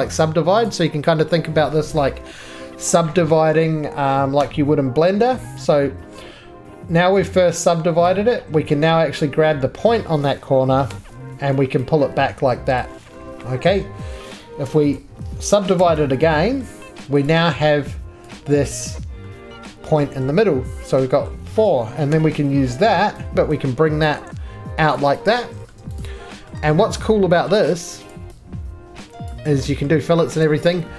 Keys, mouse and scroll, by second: 0.2 click, 0.7 click, 1.7 middle click, 4.4 s, 6.1 middle click, 8.1 click, 9.8 middle click, 10.9 g, 13.2 middle click, 13.2 click, 13.2 g, 13.4 middle click, 13.6 ctrl+z, 14.6 3, 14.9 click, 15.8 s, 16.6 middle click, 17.2 click, 18.8 click, 20.2 middle click, 21.3 middle click, 22.1 g, 26.3 click, 26.3 right click, 26.3 middle click, 26.3 scroll down 1, 26.3 g, 26.5 middle click, 26.6 2, 27.1 scroll down 1, 27.5 middle click, 27.5 scroll up 3, 28.1 click, 28.7 scroll down 2, 29.3 click, 29.9 middle click, 30.2 ctrl+z, 30.5 scroll.